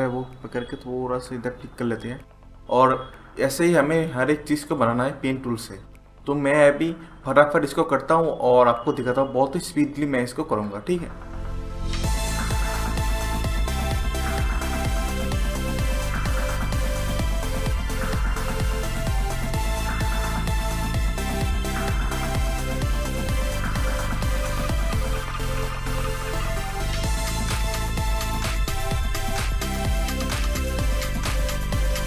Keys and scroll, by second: 0.6 Right, 16.4 ctrl+z, 17.4 Delete, 17.8 ctrl+z, 17.9-18.9 typing, 19.0 ctrl+z, 20.0 Down, 20.2 ctrl+z, 20.2 Delete, 20.9 ctrl+z, 21.2 ctrl+z, 23.9 Delete, 24.4 -, 24.4 ctrl+z, 24.5 BackSpace, 25.1 ctrl+z, 26.4 Delete, 27.4 Delete, 27.9 p, 28.1 ctrl+=, 28.3 ctrl+z, 28.9 Up, 29.2 Up, 29.3 Left, 29.3-30.2 typing, 32.0 Down.